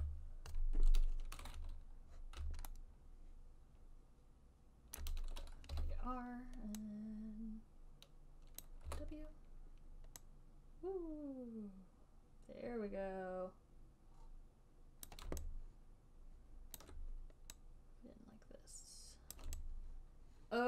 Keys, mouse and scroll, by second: 0.2 b, 2.7 b, 3.2-5.3 b, 5.3 middle click, 6.0 r, 8.9 click, 9.2 w, 15.4 click, 17.1 alt+click, 19.7 click.